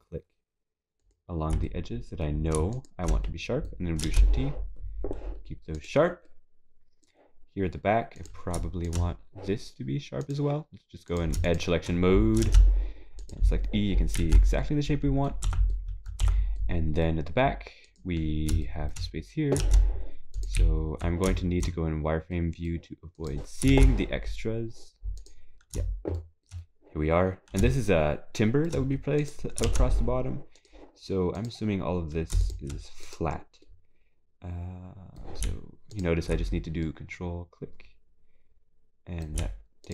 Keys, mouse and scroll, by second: 1.0 ctrl+click, 1.6 middle click, 2.7 shift+click, 3.2 middle click, 4.0 shift+e, 6.3 middle click, 9.3 shift+click, 10.2 click, 11.5 click, 11.7 shift+click, 12.5 shift+e, 14.6 middle click, 15.5 Tab, 15.7 middle click, 16.6 middle click, 17.3 scroll up 1, 17.9 click, 18.6 shift+middle click, 20.6 e, 22.4 scroll up 3, 23.2 middle click, 25.5 scroll down 2, 25.5 shift+e, 26.2 shift+middle click, 26.6-27.1 scroll up 1, 27.1 scroll up 1, 27.7 shift+middle click, 27.7 scroll up 2, 29.2 click, 29.9 shift+e, 31.4 click, 32.4 click, 33.0 shift+click, 33.6 middle click, 36.5 scroll down 2, 36.8 middle click.